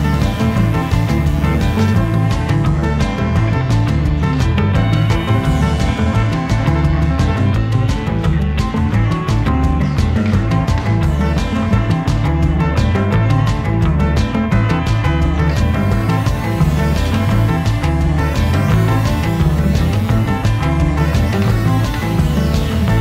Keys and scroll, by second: 4.5 super+z, 8.3 a, 10.6 super+j, 22.9 v.